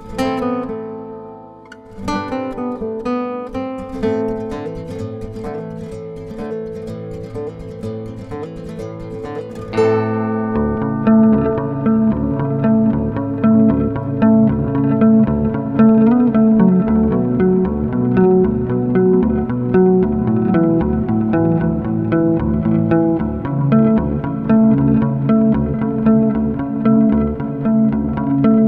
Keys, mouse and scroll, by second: 0.0 F9, 3.1 F4, 3.6 ctrl+o, 5.2 click, 7.6 click, 10.1 click, 11.6 F4, 12.4 click, 13.9 F9, 16.4 F9, 16.9 ctrl+o, 18.1 click, 21.1 click, 23.7 F4, 25.6 F9.